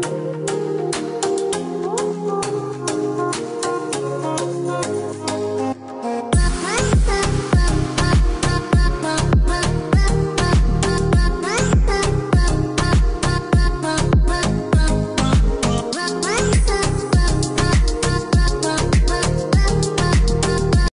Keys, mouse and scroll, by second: 0.3 click, 1.9 click, 2.5 space, 3.4 click, 4.1 click, 4.4-6.0 scroll down 1, 6.0 click, 12.9 click.